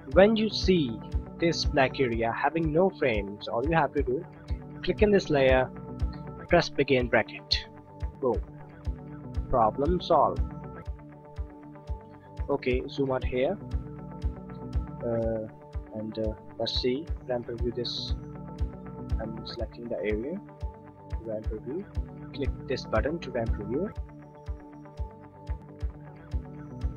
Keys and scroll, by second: 7.0 [, 18.6 b, 20.7 n.